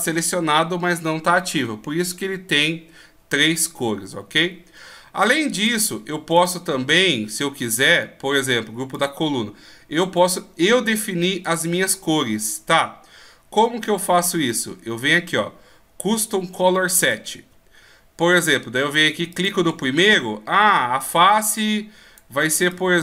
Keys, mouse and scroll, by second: 5.6 right click, 8.9 click, 19.3 click.